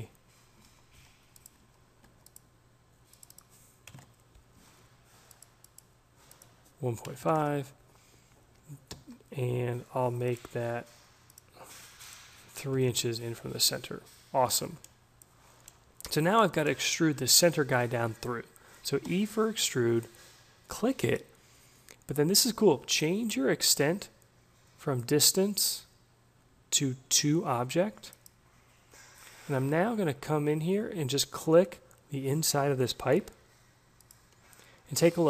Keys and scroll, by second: 0.6 ctrl+z, 0.9 d, 1.6 ctrl+z, 3.8 2, 3.9 Return, 4.5 d, 7.0 1, 7.2 Delete, 7.3 Return, 8.9 d, 12.7 3, 12.9 Return, 18.6 e.